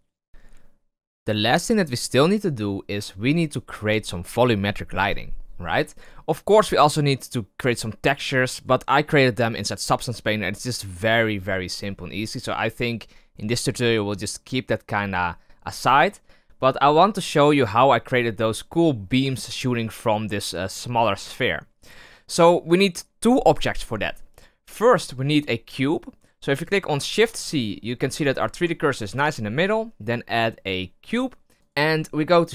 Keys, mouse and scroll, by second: 0.3 click, 7.6 right click, 8.1 right click, 8.5 right click, 21.7 right click, 24.2-27.0 middle drag, 27.0 shift+c, 27.7-28.2 scroll up 8, 28.2-31.1 shift+middle drag, 31.1 shift+a, 31.3-32.1 scroll down 9, 32.1 s.